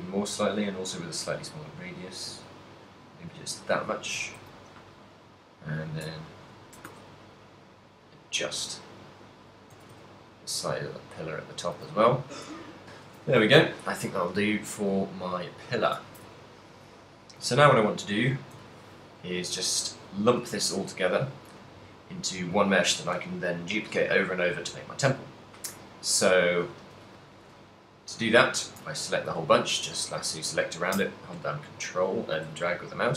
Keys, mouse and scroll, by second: 3.9 shift+click, 3.9 a, 4.2 Tab, 4.4 z, 5.5 right click, 6.2 shift+right click, 6.7 s, 9.8 click, 9.8 a, 9.9 z, 10.3 middle click, 10.7 z, 10.9 middle click, 11.9 a, 12.8 middle click, 13.2 a, 14.2 middle click, 15.1 middle click, 16.3 ctrl+middle click, 16.4 ctrl+middle click, 16.4 z, 16.8 middle click, 17.0 z, 17.5 ctrl+middle click, 18.3 z, 18.9 ctrl+click, 21.2 middle click, 21.2 z, 21.6 middle click, 22.7 shift+middle click, 27.7 middle click, 28.0 click, 29.4 z, 29.8 ctrl+click, 32.2 middle click.